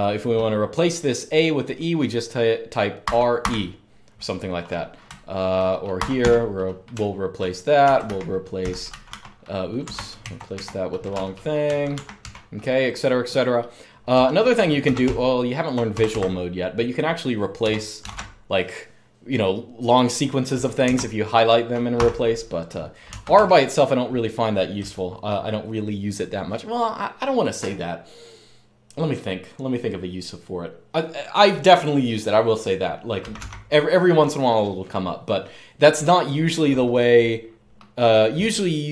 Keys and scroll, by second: 2.8-3.2 typing, 4.8-12.5 typing, 9.7 Escape, 14.6-15.8 typing, 17.4-18.3 typing, 20.7 Escape, 21.7 u, 23.0 Escape, 23.1 u, 33.0 typing.